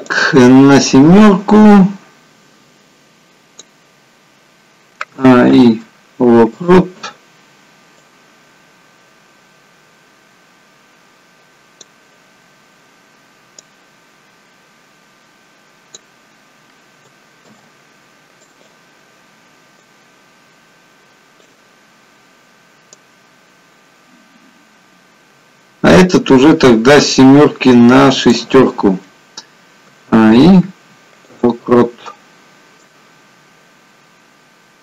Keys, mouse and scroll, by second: 18.8 a, 18.8 i, 20.0 click.